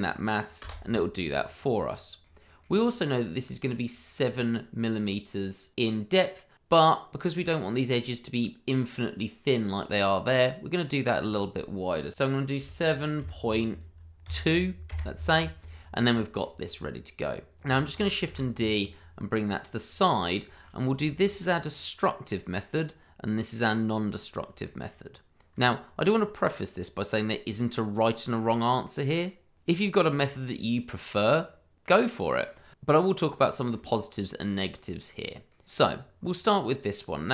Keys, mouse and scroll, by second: 0.6 Return, 1.4 scroll down 1, 2.2 middle click, 3.5 click, 7.5-9.5 scroll up 1, 11.2 click, 12.6 7, 13.2 ., 14.2 2, 14.9 Return, 15.7-16.4 scroll down 1, 16.4 middle click, 17.9 shift+d, 18.3 y, 19.7 click, 20.1-20.4 scroll down 1, 20.4 shift+middle click, 20.8 click, 21.0 shift+middle click, 21.1 middle click, 21.3 scroll up 1, 22.4 shift+middle click, 22.4 middle click, 22.5 shift+middle click, 23.5 click, 24.6 shift+middle click, 24.7 middle click, 24.8 shift+middle click, 31.3 shift+middle click, 31.4 middle click, 31.5 shift+middle click, 32.8 middle click, 34.1 shift+middle click, 34.4-35.4 scroll up 1, 35.4 middle click, 36.0 scroll down 1, 36.2 click.